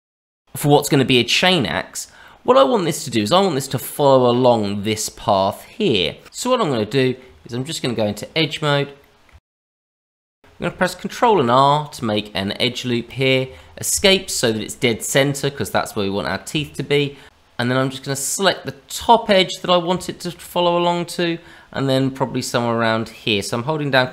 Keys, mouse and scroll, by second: 2.2 middle click, 3.1 middle click, 6.2 Tab, 6.2 middle click, 6.2 scroll up 1, 6.3 middle click, 7.2 Tab, 8.9 middle click, 9.2 Tab, 9.7 middle click, 9.9 Tab, 10.3-10.7 scroll up 3, 10.4 middle click, 11.1 ctrl+r, 14.6-15.6 scroll down 1, 15.6 middle click, 16.6 shift+middle click, 16.9 middle click, 17.2 Tab, 18.4 click, 19.5 middle click, 20.0 shift+middle click, 20.4-21.4 scroll up 2, 21.4-21.7 scroll up 1.